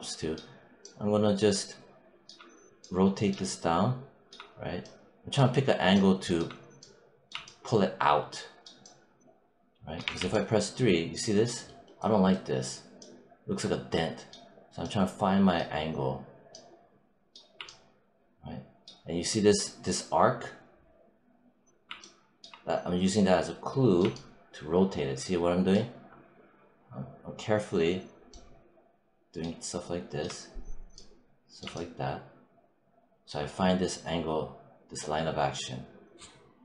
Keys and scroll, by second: 9.9 3.